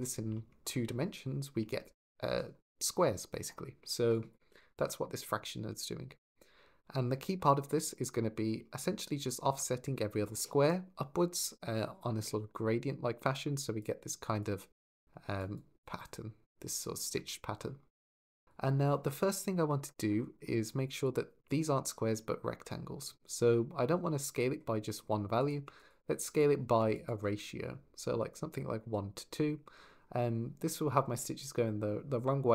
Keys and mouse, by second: 3.9 click, 4.3 x, 12.9-17.0 d, 13.1 click, 14.6 click, 20.5 click, 21.2-21.6 shift+middle drag, 23.2-24.3 drag, 25.4 click, 26.2 click, 32.4 click.